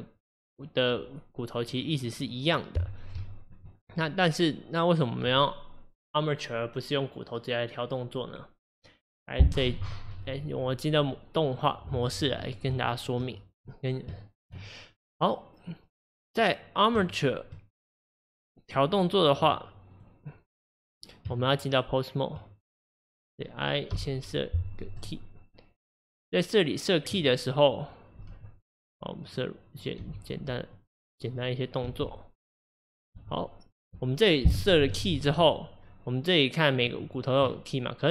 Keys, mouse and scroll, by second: 2.9-3.2 scroll down 1, 3.2-11.6 shift+middle drag, 11.6 click, 12.8-16.5 shift+middle drag, 16.5 click, 17.1-22.4 shift+middle drag, 22.4 Tab, 23.3 click, 25.0 i, 26.1-28.3 drag, 28.3 r, 29.8 click, 30.0 r, 31.4 click, 31.9 r, 33.0 click, 33.2 r, 35.5-38.1 drag.